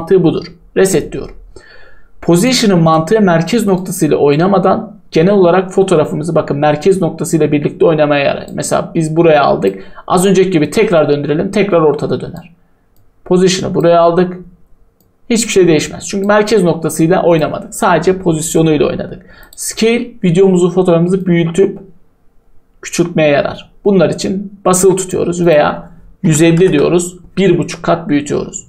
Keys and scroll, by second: 26.0-27.0 typing.